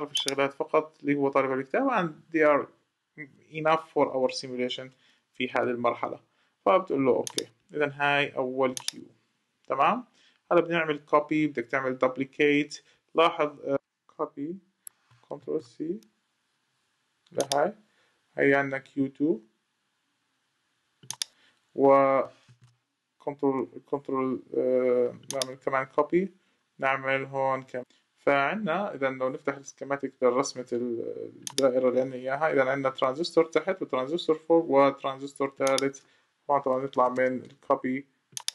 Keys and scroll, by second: 15.2 ctrl+c, 22.2 ctrl+v, 36.7 ↺.